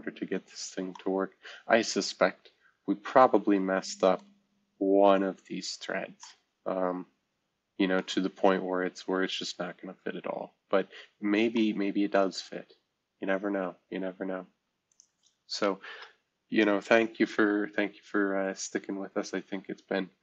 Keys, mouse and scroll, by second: 0.4-1.3 scroll up 2, 4.1 middle drag, 4.4-4.9 scroll down 2, 4.9-5.8 scroll up 2, 5.8-6.6 scroll down 2, 8.2 scroll down 2, 8.8-10.2 scroll up 4, 10.2-10.8 scroll down 3, 12.1 middle click, 12.3-12.7 scroll down 1, 12.7-14.3 scroll up 1, 14.9 click, 15.8 ctrl+s, 18.6-20.2 scroll down 1.